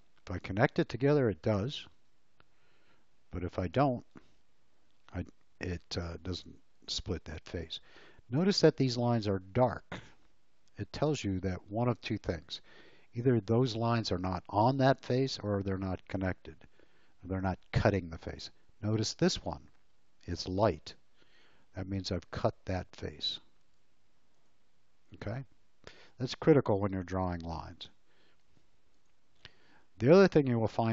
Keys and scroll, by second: 0.3 l, 1.9 space, 4.2 ctrl+z, 27.5 e.